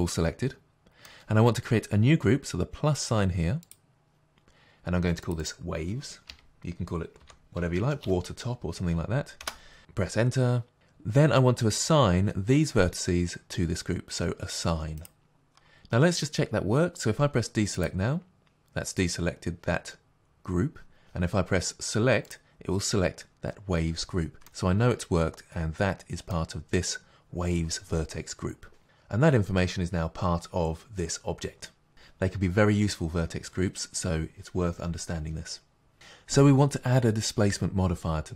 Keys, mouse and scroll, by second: 3.7 click, 13.0 t, 15.0 click, 24.5 middle click.